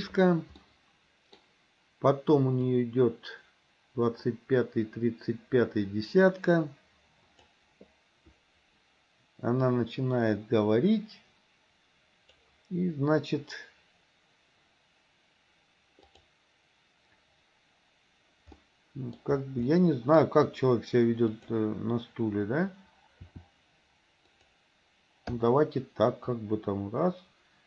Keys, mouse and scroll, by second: 0.7 middle click, 2.8-7.6 drag, 9.8-12.6 drag, 16.1 click, 18.7-19.2 middle drag, 19.7 middle click, 21.3 click, 23.2 r, 25.4 i, 26.4-27.6 drag.